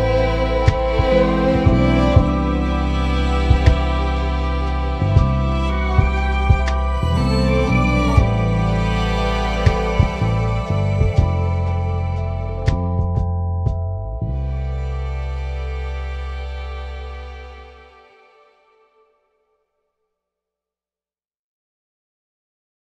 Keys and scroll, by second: 0.0 super+s, 1.7 Left, 1.9 Right, 2.6 f, 4.9 f, 13.6 Down, 21.7 super+s.